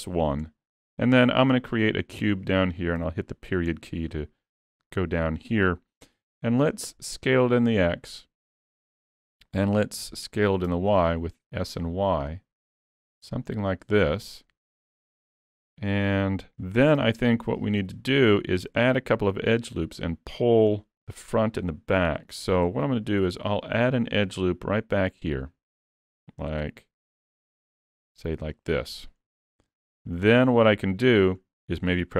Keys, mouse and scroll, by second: 0.0 middle click, 0.5 shift+middle click, 1.5 shift+a, 3.0 KP_Decimal, 3.7-4.3 scroll down 10, 4.5 middle click, 6.2 s, 8.8 middle click, 10.0 s, 14.1 scroll down 3, 14.4 middle click, 15.8 middle click, 17.0 s, 19.9 middle click, 22.1 Tab, 22.4 middle click, 23.2 ctrl+r, 28.9 scroll up 2, 29.3 shift+middle click, 30.3 middle click, 30.9 scroll up 2, 31.2 shift+middle click.